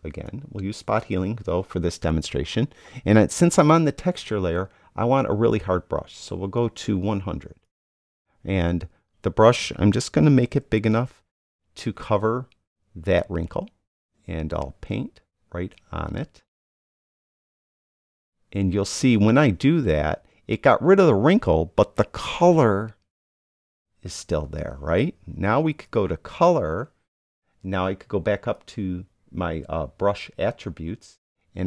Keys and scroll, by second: 10.7 [.